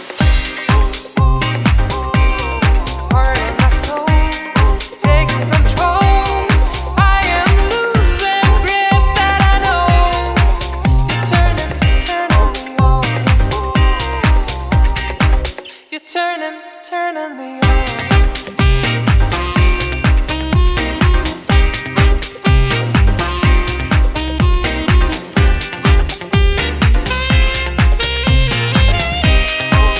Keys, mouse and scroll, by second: 1.2 scroll up 1, 1.7 click, 4.1 scroll down 2, 4.3 middle click, 4.8-5.5 scroll up 1, 5.5 scroll down 1, 5.6 scroll down 1, 5.7 middle click, 6.4 scroll up 1, 8.2 click, 8.6-9.5 scroll down 13, 9.7 click, 9.7 scroll down 1, 12.2 click, 13.9 scroll up 3, 14.2 middle click, 14.7 scroll up 1, 14.8 middle click, 15.3 click, 21.9-22.7 scroll down 5, 22.7 click, 23.7 scroll down 3, 24.0 middle click, 24.4 scroll down 3, 24.7 middle click, 25.1 scroll up 4, 25.3 middle click, 25.9 scroll up 3, 26.1 middle click, 26.5 scroll up 2, 26.7 middle click, 27.0-27.5 scroll down 10, 27.9-28.9 scroll up 7, 28.3 middle click, 29.3 click.